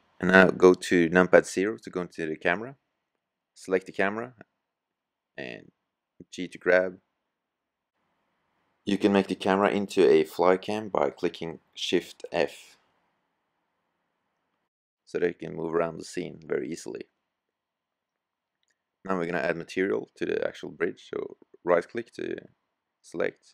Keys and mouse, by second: 2.7 g, 4.9 g, 8.3 shift+f.